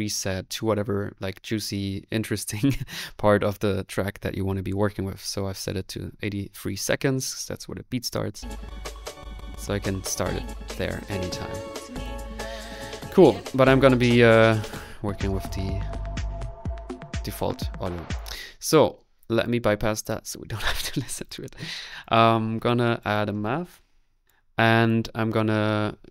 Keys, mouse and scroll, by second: 8.5-9.3 typing, 10.2 click, 13.8-14.8 typing, 14.8 click, 18.2 click, 18.6 middle click, 18.6-19.2 scroll up 1, 19.2 click, 23.0 middle click, 24.0-24.7 typing, 24.2 click, 24.9 click, 25.2-26.1 middle drag.